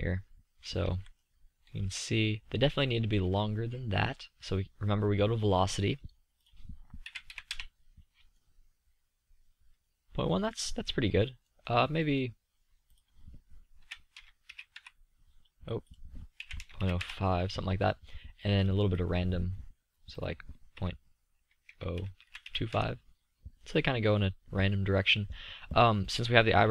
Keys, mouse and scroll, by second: 1.8 z, 3.0 z, 5.4-9.3 middle drag, 10.5-11.8 middle drag, 13.9-16.0 drag, 16.0 middle click, 16.7-18.4 drag, 18.4 middle click, 18.6-22.9 middle drag, 23.8-26.7 middle drag.